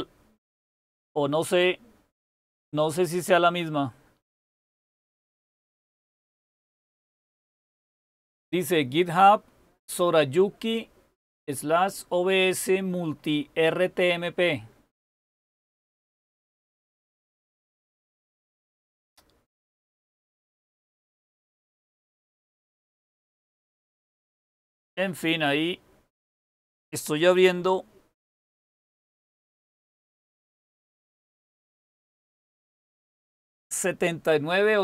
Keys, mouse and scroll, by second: 0.5-1.0 scroll down 1, 1.0-3.7 scroll down 1, 3.7-4.6 scroll down 1, 4.6-5.3 scroll down 1, 5.3-5.8 scroll up 1, 5.8-7.0 scroll up 1, 7.0-7.6 scroll up 1, 7.6-8.5 scroll up 1, 8.5-9.9 scroll up 1, 9.9-12.6 scroll up 1, 12.6-13.9 scroll up 1, 13.9-14.6 scroll up 1, 14.6-15.4 scroll up 1, 15.4-16.7 scroll up 1, 16.7-17.4 scroll up 1, 17.4-18.1 scroll up 1, 18.1-20.3 scroll up 1, 20.3-21.4 scroll up 1, 21.4-22.3 scroll up 1, 22.3-23.3 scroll up 1, 23.3-23.9 scroll up 1, 23.9-25.6 scroll up 1, 25.6-26.4 scroll up 1, 26.4-27.5 scroll up 1, 27.5-28.5 scroll up 1, 28.5 super+k.